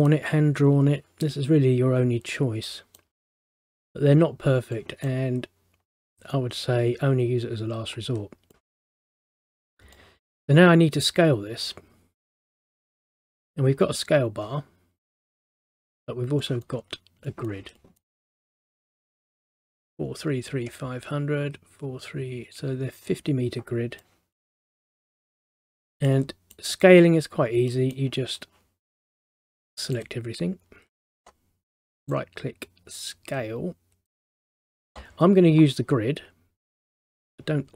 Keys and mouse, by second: 2.7 middle click, 4.9 middle click, 8.7 middle click, 16.5 middle click, 24.1 middle click, 27.8 middle click, 29.3 click, 30.0 click, 32.1 right click, 34.2 click.